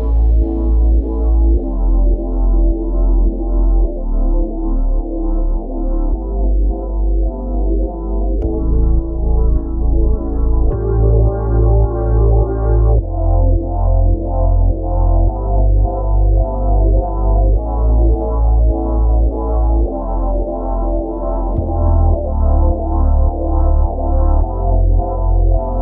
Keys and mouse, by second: 5.2 click, 7.8 click, 10.7 click, 19.2 click, 24.7 click.